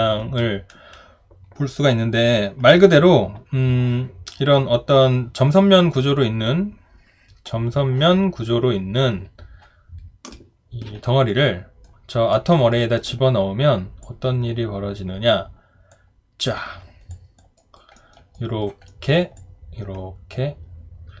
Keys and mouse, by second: 11.3 alt+right click, 12.3 alt+middle click, 12.7 alt+right click, 17.1 alt+click, 17.6 alt+right click, 18.0 alt+middle click, 18.3 alt+right click, 18.9 alt+middle click.